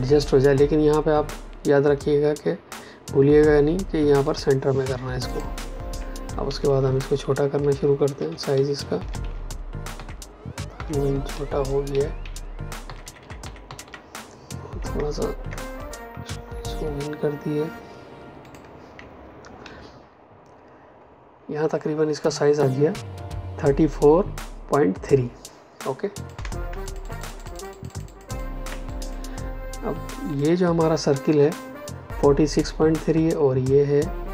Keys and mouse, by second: 4.2 click, 6.4 shift+Down, 9.9 shift+Up, 11.2 shift+Down, 12.8 Up, 14.9 ctrl+KP_Subtract, 18.4 click, 19.6 Down, 26.1 click, 26.3 space, 26.8 ctrl+alt+click, 28.6 click.